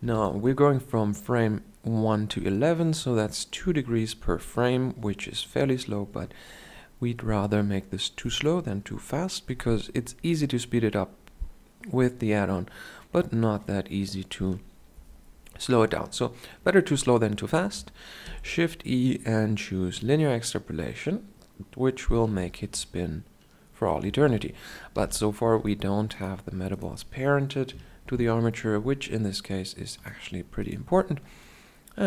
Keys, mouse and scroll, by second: 4.0-18.1 middle drag, 18.1 shift+e, 20.9 middle click, 22.2 alt+a, 24.0 alt+a, 24.8 shift+Left, 24.8 shift+Down, 27.8 ctrl+p, 27.8 right click, 28.2-29.9 right drag, 31.4-32.0 drag, 31.4-32.0 right drag.